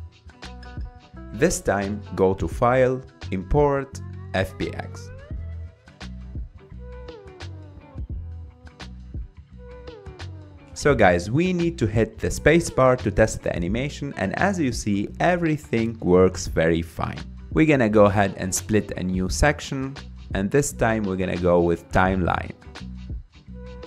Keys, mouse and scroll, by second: 0.6 click, 2.6-3.4 drag, 8.0-8.8 scroll up 4, 8.8 scroll up 1, 9.3-12.4 middle drag, 13.1 scroll down 5, 13.7-14.7 middle drag, 14.7 space, 15.5-15.8 scroll up 3, 16.0-16.4 middle drag, 16.5 middle click, 17.0 middle click, 17.3 space, 18.0-23.8 drag.